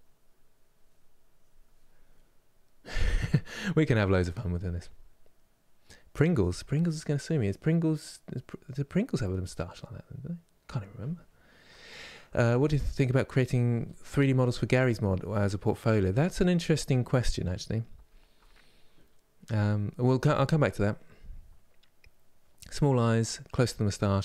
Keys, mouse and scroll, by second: 0.9 click, 1.8-9.8 middle drag, 15.9-24.2 shift+middle drag.